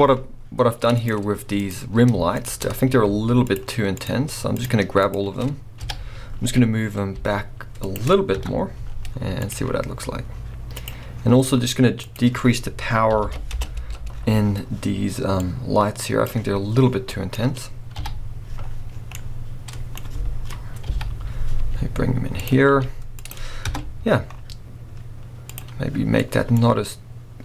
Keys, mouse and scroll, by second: 2.4 shift+click, 2.6-3.6 scroll down 1, 3.6 shift+click, 5.8 KP_7, 6.8-7.1 scroll down 1, 7.1 g, 7.9 click, 8.4 KP_0, 9.5 z, 9.8 scroll up 1, 10.9 click, 11.2 scroll down 1, 13.5-17.1 drag, 13.6 Return, 14.5 scroll up 1, 16.8 scroll down 1, 17.1-22.5 middle drag, 17.3-17.8 scroll up 1, 18.0 KP_7, 18.5 scroll down 1, 20.9 KP_7, 21.6 g, 22.5 click, 22.7 r, 23.3 click, 23.6 KP_0, 24.3 scroll up 1, 25.6 click.